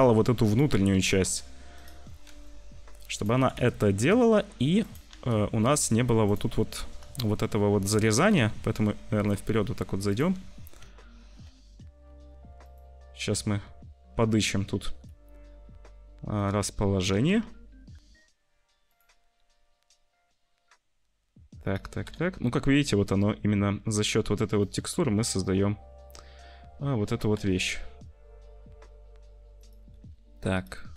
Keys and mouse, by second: 0.9 r, 2.2 g, 3.3 s, 5.1 r, 6.4 middle click, 7.1 shift+middle click, 8.1 g, 10.7 `, 12.0 g, 13.2 `, 14.8 g, 17.1 r, 19.9 r, 21.9 g, 25.5 g, 27.3 g, 30.1 g, 30.8 click.